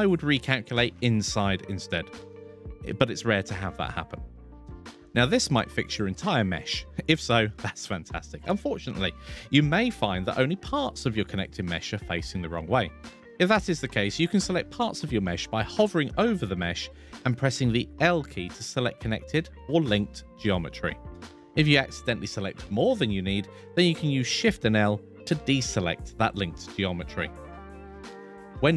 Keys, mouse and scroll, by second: 5.1-9.3 middle drag, 12.1 a, 12.5 a, 12.6 a, 13.3 middle click, 15.0 l, 15.7 l, 22.9 l, 23.3 l, 23.7 l, 23.8 l, 24.9 l, 25.6 shift+l.